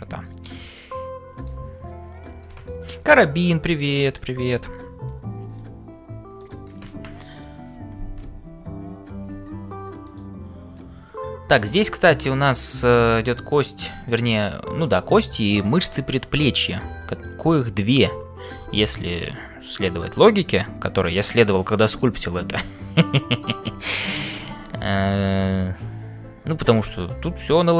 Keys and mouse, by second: 0.0-27.7 typing, 2.6 shift+click, 2.7 shift+middle click, 4.2 shift+middle click, 6.4 click, 7.3 click.